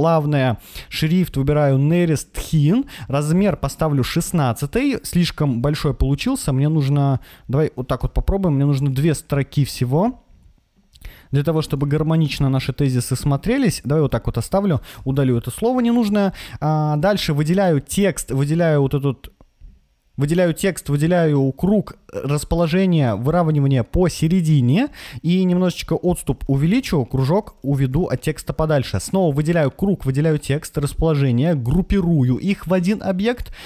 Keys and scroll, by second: 7.9 BackSpace, 14.8 BackSpace, 26.1 Left.